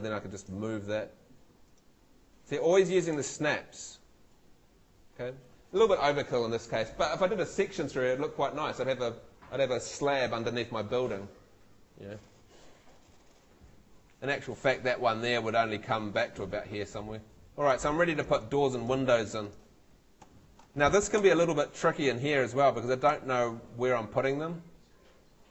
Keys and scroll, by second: 3.1 Escape, 17.5 Escape, 20.3 Home, 21.2 F2, 23.1 F3.